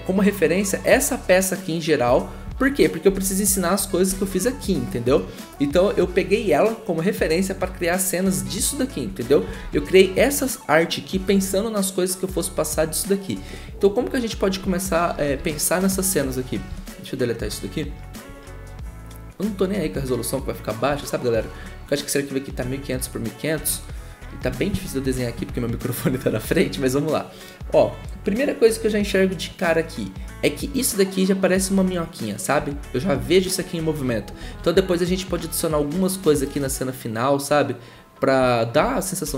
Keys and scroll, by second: 1.5 e, 2.6 ctrl+z, 3.0 ctrl+z, 4.1 ctrl+z, 9.6 ctrl+z, 15.4 v, 16.7 Delete, 20.9 b, 23.5 ctrl+z, 34.4 ctrl+z, 38.8 ctrl+z, 39.2 ctrl+z.